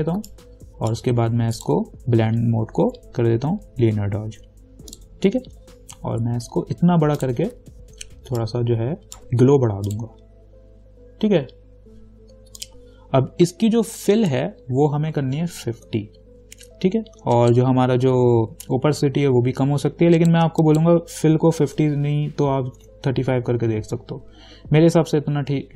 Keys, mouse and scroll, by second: 0.5-1.8 alt+right drag, 1.8 click, 5.2 click, 7.4 click, 9.0-10.1 alt+right drag, 10.1 click, 12.8 click, 15.5-16.5 typing, 17.6 click, 20.4 click, 22.7-23.5 typing.